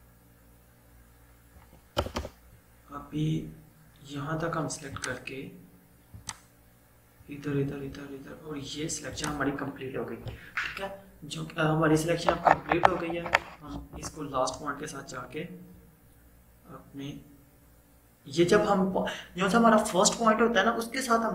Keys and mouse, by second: 2.1 BackSpace, 5.2 click, 9.2 click, 14.8-16.2 typing.